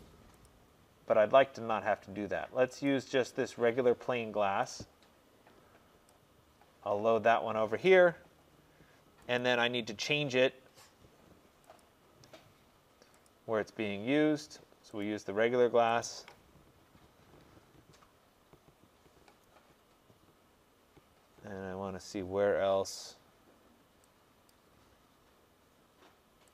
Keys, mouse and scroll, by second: 0.5 click, 2.9 click, 6.1 click, 9.4 click, 11.9 click, 13.3 click, 15.1 click, 16.1 click, 24.6-26.5 drag.